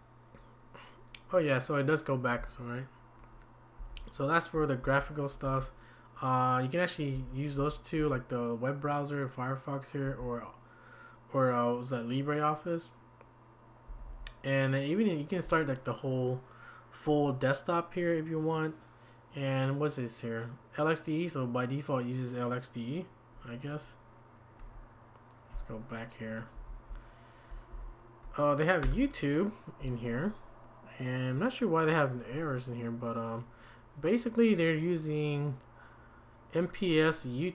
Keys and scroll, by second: 3.8 Down, 4.5-5.4 typing, 7.1 Down, 7.5 Up, 8.0 Down, 10.0 Up, 13.9 Down, 24.6 Escape, 26.5 Up, 26.9 Down, 27.4 Down, 27.4 Down, 27.7 Down, 28.8 Return.